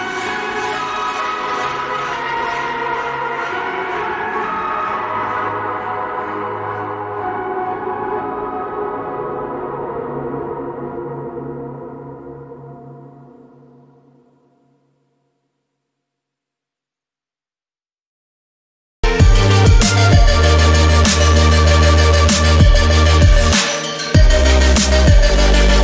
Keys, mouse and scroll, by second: 2.5 click, 8.1 click, 13.6 click, 16.7 x, 16.9-17.6 scroll up 1, 17.6-18.0 scroll down 1, 18.2-18.6 alt+scroll up 2, 19.1-19.7 alt+scroll down 2, 19.7 click, 20.4-20.8 scroll up 1, 21.2 click, 21.9-22.3 scroll down 1, 22.5-22.9 alt+scroll up 2, 24.3-24.8 scroll down 1.